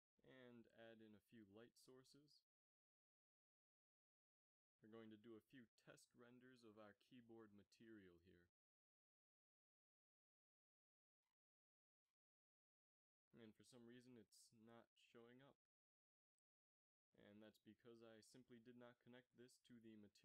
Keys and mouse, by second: 0.6 shift+a, 3.4 g, 4.4 r, 5.2 r, 7.6-10.9 drag, 11.6-13.8 drag, 12.9 shift+z.